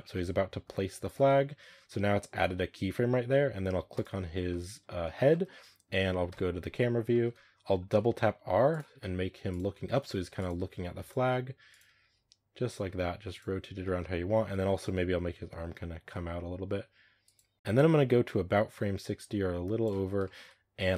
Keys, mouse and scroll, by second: 0.0-0.6 middle drag, 1.1-3.8 middle drag, 3.8 right click, 4.4-4.7 middle drag, 4.7 scroll up 2, 5.0-5.6 shift+middle drag, 5.6-6.1 scroll up 1, 6.1 KP_0, 7.0 shift+middle click, 7.2 scroll up 2, 8.8-12.7 typing, 13.7-14.6 shift+middle drag, 14.6 right click, 15.0 r, 17.5-20.1 drag, 20.1-20.6 shift+middle drag, 20.6 scroll down 1.